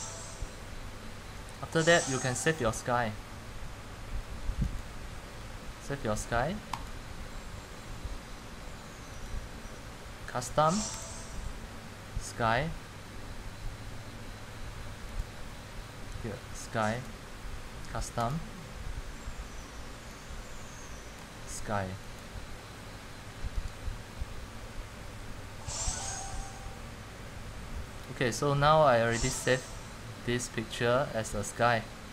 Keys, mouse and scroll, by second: 2.9 c, 4.9-28.9 drag.